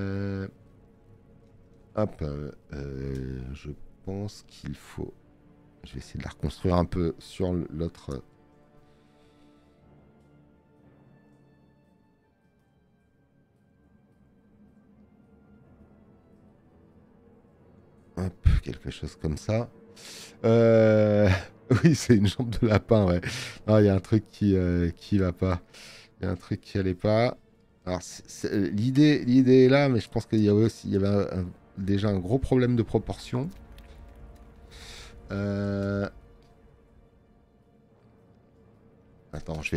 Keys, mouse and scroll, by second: 22.7 space, 22.8 click.